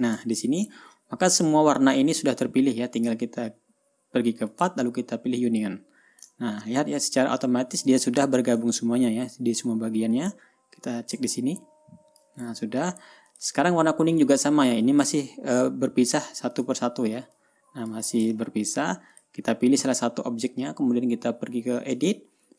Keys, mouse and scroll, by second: 0.0 click, 0.8-1.1 ctrl+scroll down 2, 5.0 click, 6.0 click, 7.0 ctrl+scroll up 2, 10.7-12.9 drag, 13.0 ctrl+y, 13.8 drag, 14.7 click, 15.4 click, 16.1 click, 16.6 click, 17.1 click, 17.9-18.6 drag, 18.8 ctrl+y, 19.7 click, 22.5 click.